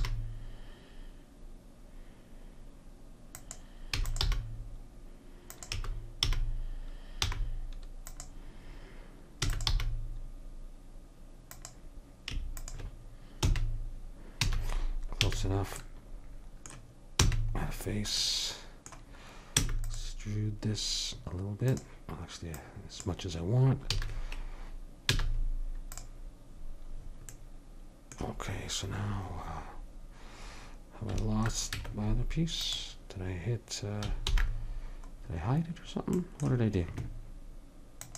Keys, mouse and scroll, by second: 0.0 g, 4.3 g, 5.7 e, 9.5 e, 9.7 g, 13.5 f, 14.4 a, 15.2 a, 17.2 f, 19.5 e, 21.6-24.5 drag, 23.9 a, 25.1 z, 31.7 Tab, 34.2 alt+h, 38.0-38.1 drag.